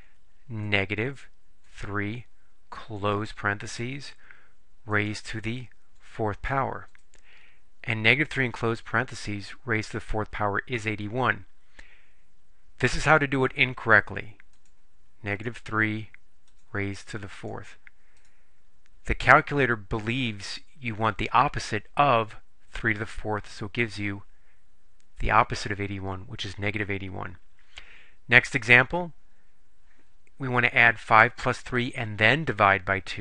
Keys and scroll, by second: 1.7 3, 3.1 ), 5.0 ^, 6.1 4, 6.9 Return, 15.4 3, 16.6 ^, 17.5 4, 18.2 Return.